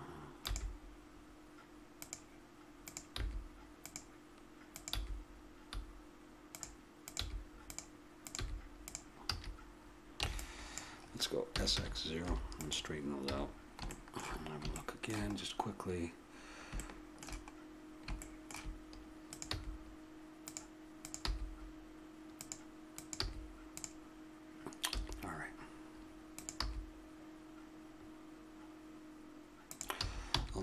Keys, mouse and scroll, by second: 0.4-1.5 right drag, 0.5 g, 3.2 g, 4.9 g, 7.2 g, 8.4 g, 9.3 a, 10.2 b, 11.5 s, 13.2 a, 13.5 middle click, 17.7-19.3 middle drag, 19.3 right click, 19.5 g, 21.2 g, 23.2 g, 24.9 a, 26.3 right click, 26.6 g, 30.0 a, 30.3 b.